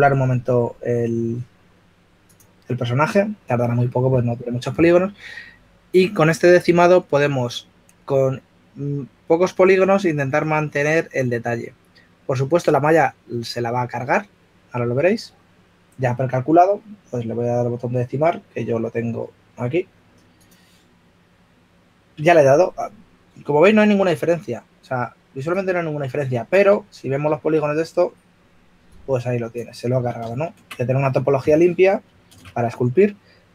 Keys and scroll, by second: 28.1 shift+f, 32.6 super+z.